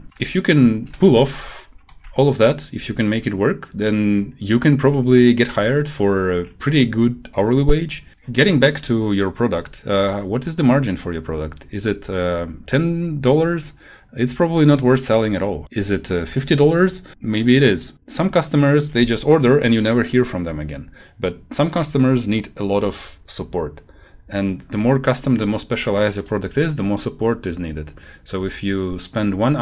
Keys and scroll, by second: 0.4 shift+Down, 1.0 shift+Left, 6.0 shift+Down.